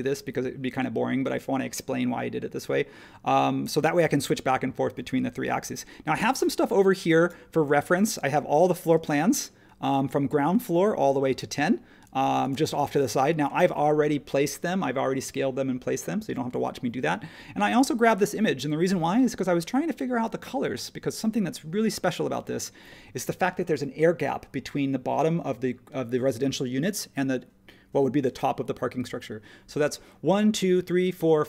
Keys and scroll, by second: 5.6 h, 9.0 space.